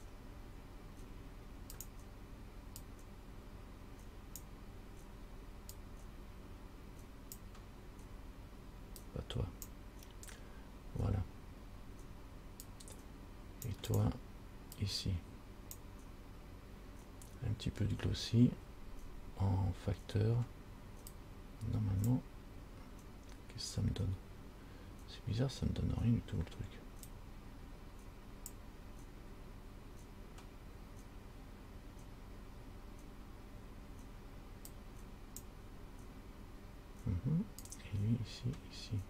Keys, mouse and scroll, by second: 3.0 click, 5.9 click, 9.3 click, 11.7 scroll up 2, 12.9 click, 14.1 click, 15.0 click, 21.4 click, 27.3 click, 35.0 click, 37.8 click.